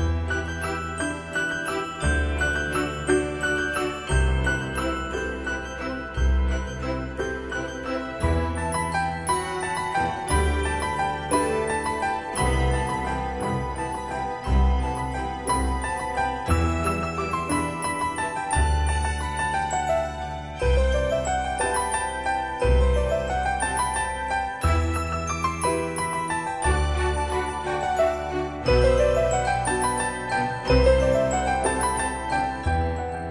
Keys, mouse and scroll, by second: 0.3-2.4 scroll up 1, 3.8 Escape, 6.3 click, 14.7-15.0 scroll down 1, 15.6-16.8 scroll up 1, 16.8 m, 17.8 click, 20.2 scroll up 1, 25.7-26.5 scroll down 1, 26.8 shift+middle click, 28.6-29.7 scroll up 1, 29.7 c, 32.5 d.